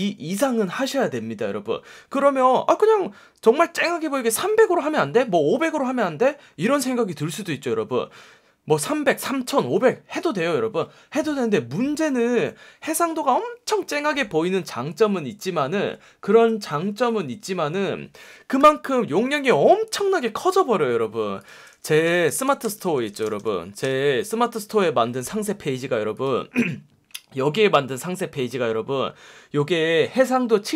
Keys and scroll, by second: 22.0-23.9 typing, 24.3 Return.